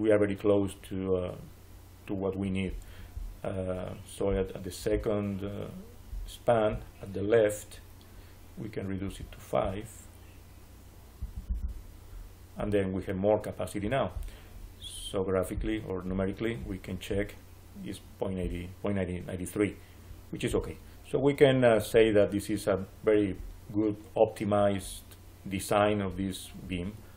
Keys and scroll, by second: 11.1 5, 11.4 Return.